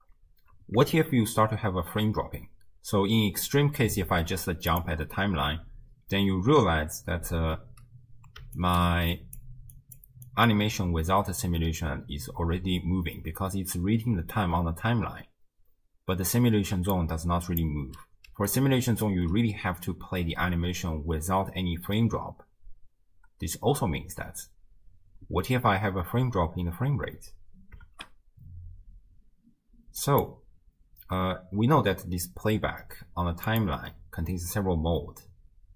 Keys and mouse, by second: 0.9 shift+space, 4.7 click, 8.7 ctrl+alt+click, 9.2 ctrl+alt+click, 9.7 ctrl+alt+click, 10.3 ctrl+alt+click, 16.8-17.8 d, 17.0 click, 18.3 d, 18.5 click, 19.1 d, 19.2 d, 20.4 shift+space, 23.3 space, 27.9 shift+space, 30.1-35.7 drag.